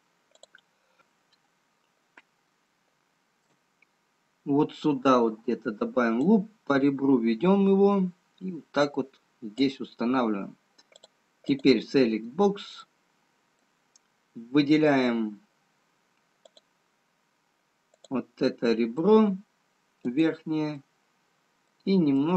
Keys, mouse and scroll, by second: 1.0 click, 1.0 scroll up 1, 2.0 scroll down 1, 3.0 shift+middle click, 4.8-6.3 scroll up 3, 6.3 click, 12.7 click, 13.1 middle click, 16.5 click, 18.2 click, 18.5 middle click, 20.7 click, 20.9 middle click.